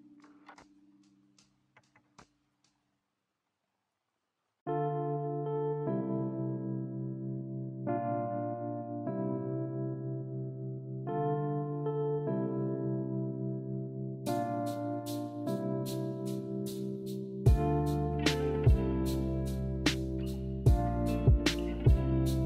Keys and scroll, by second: 4.4 a, 9.2 a.